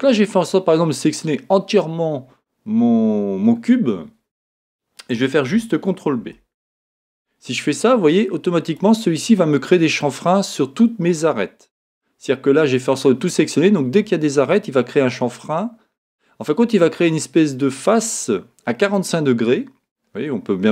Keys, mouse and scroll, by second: 0.3-8.8 middle drag, 6.1 ctrl+b, 8.8 click, 9.1 scroll up 1, 10.0-20.7 middle drag.